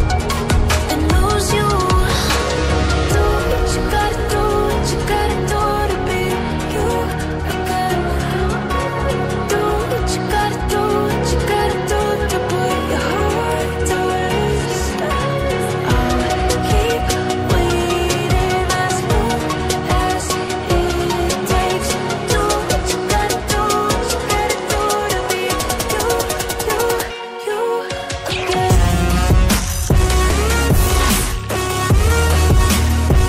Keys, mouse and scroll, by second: 0.6 ctrl+c, 0.8 typing, 1.5 click, 2.5 click, 2.5 scroll down 1, 4.3 click, 11.0 click, 12.3 double click, 14.4 scroll up 1, 14.9 click, 18.4 shift+click, 20.3 click, 21.6 ctrl+z, 24.1 click, 26.6 click, 28.1 double click, 31.4 scroll up 1, 32.6-33.2 scroll down 1.